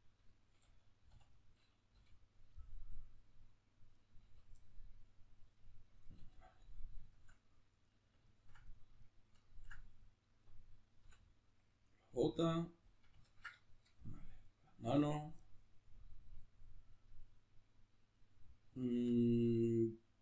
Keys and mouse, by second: 1.1 3, 1.3 right click, 1.9 l, 2.6-3.9 middle drag, 3.9 right click, 4.2 l, 4.6-6.0 middle drag, 6.0 right click, 6.3 l, 7.0-10.4 shift+middle drag, 10.4 right click, 11.0 l, 12.0-14.4 middle drag, 14.4 right click, 14.8 l, 15.4-18.8 middle drag, 18.8-20.2 middle drag.